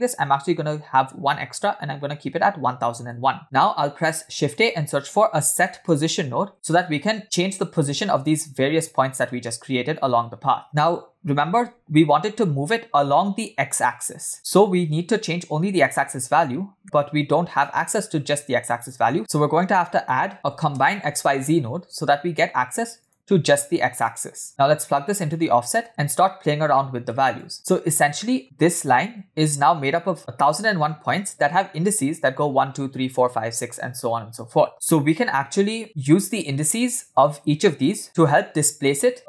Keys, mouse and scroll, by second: 3.9 shift+a, 8.8 click, 10.5 click, 11.7 KP_7, 16.8 middle click, 17.7-18.8 drag, 19.1 shift+a, 23.8 click, 24.6-25.4 drag, 25.8 click, 26.8 middle click, 27.3 click, 28.2 middle click.